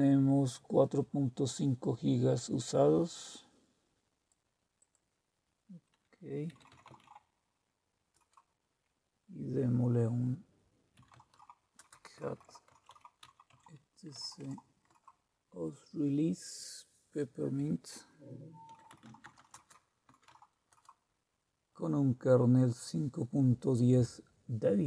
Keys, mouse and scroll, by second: 2.6-4.9 drag, 6.2-7.5 typing, 8.1 Return, 10.7-15.1 typing, 18.4-21.4 typing.